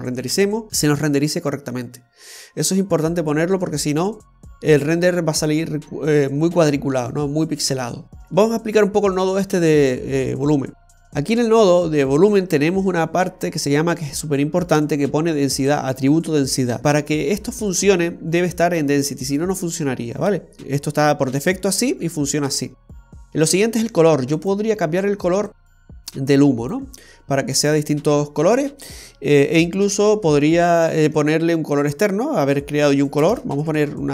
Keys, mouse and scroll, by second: 8.6 middle click, 12.6-15.4 scroll up 2, 24.4 click, 33.5 shift+a.